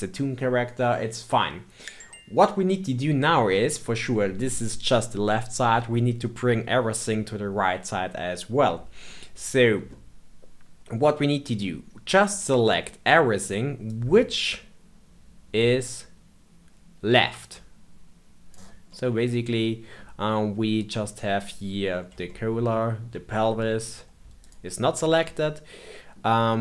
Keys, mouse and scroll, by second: 3.5-6.5 middle drag, 9.8-12.9 middle drag, 13.8 click, 18.8-21.8 middle drag, 22.2-24.3 shift+middle drag, 24.3 shift+click, 25.2-26.6 middle drag.